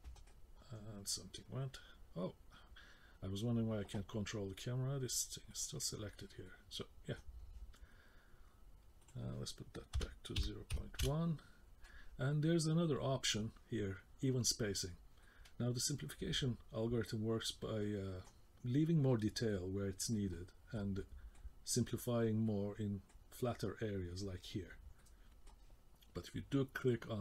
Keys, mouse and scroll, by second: 6.4 middle click, 9.0 click, 12.3 middle click, 15.2 middle click, 18.4 scroll up 1, 19.1-19.5 scroll down 1, 19.5 middle click, 20.3 middle click, 21.0 middle click, 22.5 middle click, 25.0 middle click.